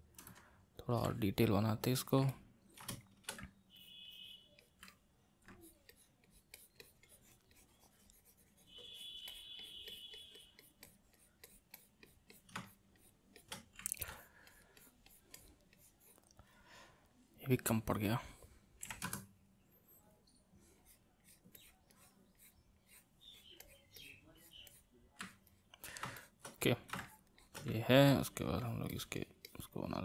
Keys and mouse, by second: 1.1-3.8 middle drag, 3.8-4.9 drag, 4.9 middle click, 5.6-20.2 drag, 20.8-25.2 drag, 25.2-27.0 middle drag, 27.0 shift+click, 27.8 middle click, 28.6-30.0 drag.